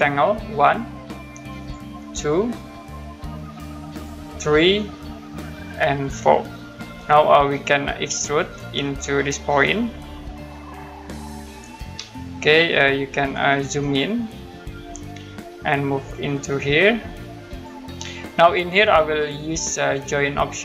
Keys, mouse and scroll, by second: 1.6 click, 3.9 click, 6.0 click, 8.6 click, 12.2 middle click, 13.5 middle click, 14.1-14.7 scroll down 1, 16.1 click, 19.5 click.